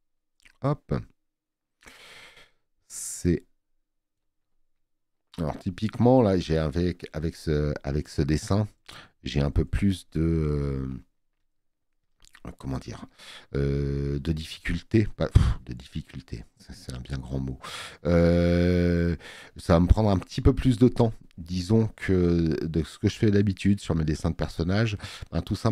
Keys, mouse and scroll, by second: 6.5 click, 20.0 space, 20.2 click.